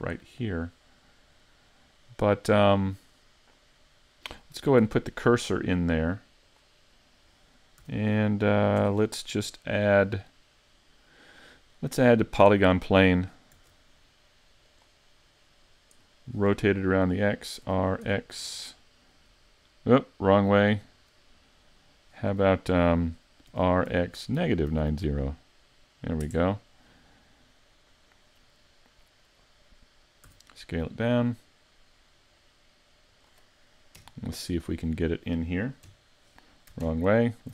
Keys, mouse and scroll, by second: 0.2 middle click, 1.5 middle click, 4.8 shift+s, 7.0 middle click, 7.8 a, 8.8 Tab, 9.5-10.1 scroll down 2, 9.9 middle click, 13.6 shift+a, 15.2-16.1 scroll down 3, 16.1 middle click, 17.7 r, 23.5 r, 27.2 scroll down 1, 27.6 middle click, 30.3 s, 33.2 click, 34.0 KP_Decimal, 34.7-35.9 scroll down 1, 35.9 scroll down 1, 35.9 KP_1, 36.9 ctrl+KP_1.